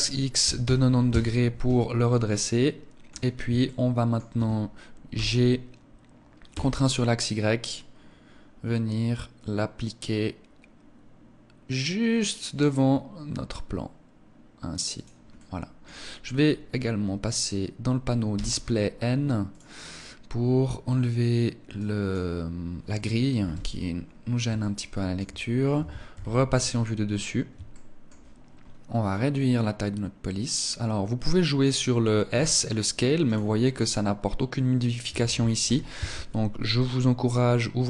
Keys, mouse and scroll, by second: 1.6 middle click, 3.1 shift+middle click, 4.7 g, 14.5 click, 14.9 middle click, 17.9 n, 19.0 click, 21.3 click, 22.9 n, 23.5-24.1 scroll down 1, 24.1 shift+middle click, 24.1-24.5 scroll down 1, 25.6 KP_1, 27.2 shift+middle click, 28.0-28.6 scroll down 1, 28.6 click, 31.9 s, 32.8 click, 35.2 ctrl+z, 36.9 click.